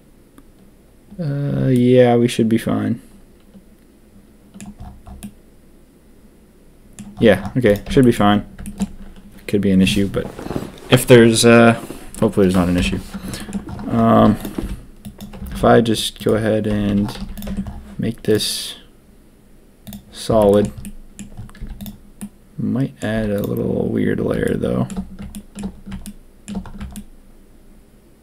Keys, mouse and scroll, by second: 1.7-4.5 middle drag, 5.2-6.9 middle drag, 7.6 click, 7.8 Tab, 8.0 middle click, 8.6 shift+middle click, 12.7 ctrl+KP_3, 13.3 shift+middle click, 14.1 z, 14.5 b, 15.5 ctrl+b, 16.7 a, 16.8 a, 17.1 z, 17.4 Tab, 18.2-19.9 drag, 20.8 drag, 21.5 z, 22.1-23.0 drag, 23.1 z, 24.4 shift+drag, 24.5-24.8 shift+middle drag, 25.3 shift+click, 25.3 shift+middle drag, 26.0-26.4 shift+drag, 26.9-28.2 shift+drag.